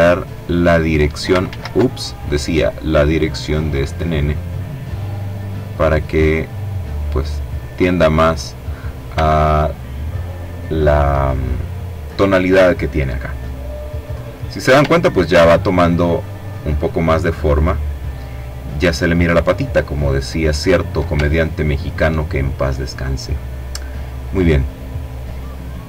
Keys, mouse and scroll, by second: 0.3 ctrl+z, 1.1-7.3 drag, 8.2-8.8 ctrl+scroll down 2, 10.9 middle click, 12.8 click, 14.0-14.4 ctrl+scroll up 2, 14.7-19.6 ctrl+drag, 20.2-20.7 ctrl+scroll up 3, 22.6 click.